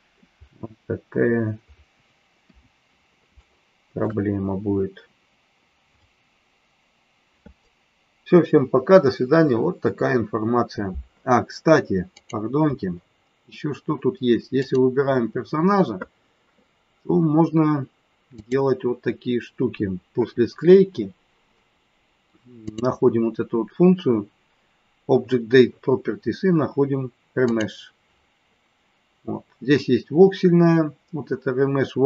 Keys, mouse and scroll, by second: 2.3 KP_1, 3.4 shift+middle click, 12.2 click, 14.6 click, 22.7 click, 27.4 click.